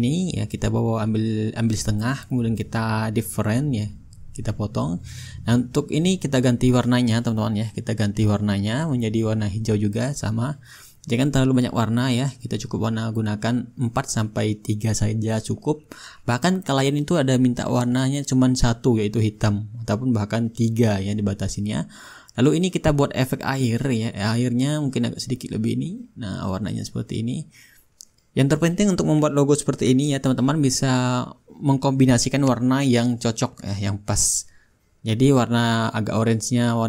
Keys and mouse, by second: 2.2-5.8 shift+drag, 6.5-10.6 drag, 9.4-10.6 middle drag, 13.7-15.1 drag, 15.3-16.4 drag, 17.4-23.1 drag, 24.4-25.5 drag, 25.9-29.2 drag, 29.6-31.8 drag, 30.6-31.8 right drag, 32.5 ctrl+z, 33.2-36.5 drag, 33.5-36.5 right drag.